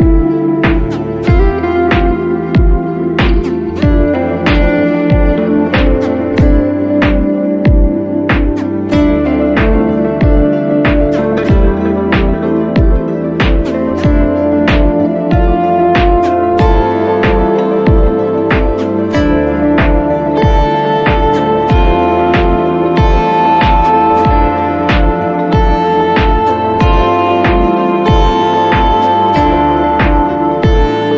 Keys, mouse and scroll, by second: 0.3 scroll down 1, 1.1 space, 1.2 space, 3.1 space, 3.4 ctrl+j, 4.0 click, 6.3 click, 7.2 ], 7.3 ], 7.9 scroll down 1, 8.8 click, 10.2-11.2 ], 11.9 scroll up 1, 12.4 click, 13.3 [, 13.4 [, 13.5 click, 14.1 scroll up 1, 14.4 ], 14.4 click, 15.9 [, 16.0 [, 16.1 click, 17.0 scroll up 1, 17.1 click, 17.7 [, 17.8 click, 18.0 z, 18.2 x, 18.3 click, 19.7 right click, 20.8 click, 21.1 right click, 22.6 click, 24.6 right click, 26.3 click, 26.9 scroll up 1, 30.4-30.8 scroll up 1.